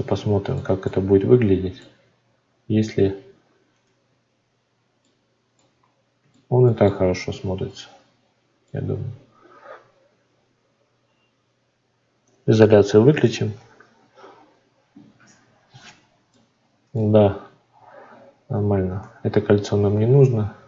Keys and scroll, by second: 19.0 Tab.